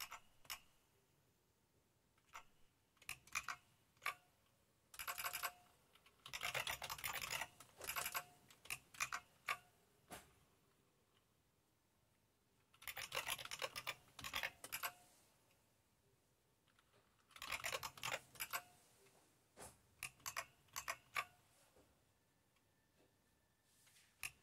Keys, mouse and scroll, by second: 0.0 Up, 0.5 Up, 1.1 Up, 1.2 Up, 3.4 super+Left, 5.0 Return, 5.2 Return, 5.3 Return, 6.0-7.8 typing, 7.9 Return, 8.0 Return, 9.2 super+Left, 12.7-14.9 typing, 17.1-18.5 typing, 20.2 super+Right, 20.8 super+Right.